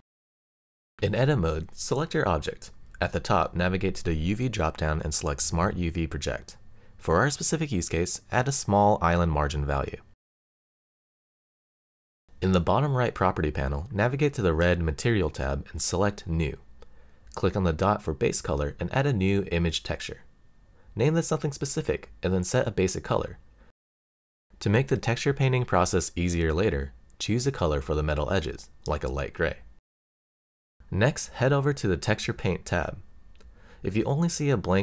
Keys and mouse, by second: 0.5 click, 0.9 Tab, 2.2-4.1 middle drag, 4.5 a, 5.9-11.0 drag, 15.6 click, 17.2-19.0 drag, 21.1-31.9 drag.